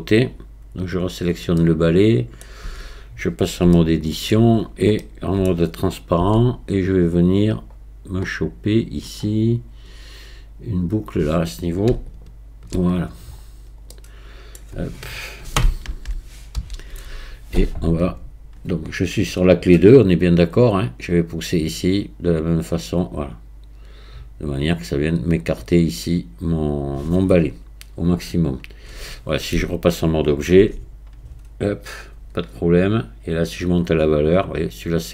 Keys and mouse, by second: 0.9 click, 1.6-2.4 middle drag, 2.7 Tab, 3.7 shift+middle click, 4.8 middle click, 5.0 shift+click, 5.4 middle click, 6.2 z, 13.9 middle click, 15.9 ctrl+KP_1, 16.6 z, 21.1 click, 30.6 Tab, 33.8-35.1 drag.